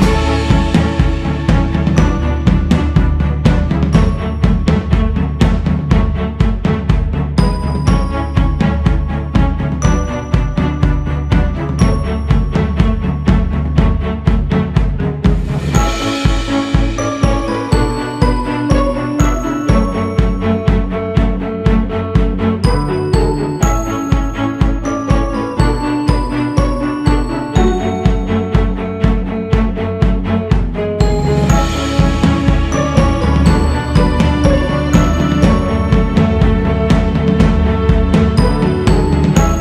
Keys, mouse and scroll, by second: 0.6-2.0 scroll down 2, 2.0 click, 3.5 click, 4.7 scroll up 2, 5.2-5.6 scroll up 3, 5.6-8.2 drag, 8.2-8.9 scroll down 6, 9.9 click, 10.8 click, 11.5-13.7 drag, 14.1-14.9 scroll up 4, 14.9 click, 15.6-16.0 scroll up 5, 16.0-17.3 drag, 17.3 f, 18.7 g, 19.6-21.9 drag, 21.9-23.2 scroll up 5, 23.2-24.5 drag, 24.5-25.0 scroll up 3, 26.2-26.7 scroll up 1, 26.7-33.5 drag, 33.5-34.3 scroll down 6, 34.6-35.4 scroll down 4, 35.4 scroll down 4, 36.6 click, 37.5-38.0 scroll up 2, 38.0 click, 38.7-39.0 scroll down 1, 39.0-39.6 drag.